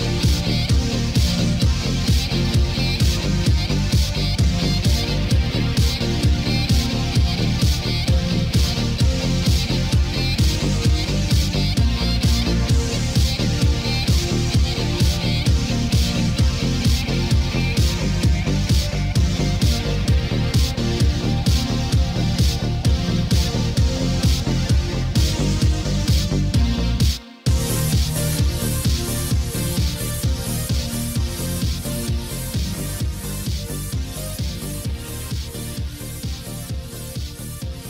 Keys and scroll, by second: 10.9 ctrl+z, 16.6 ctrl+z, 25.5 ctrl+d.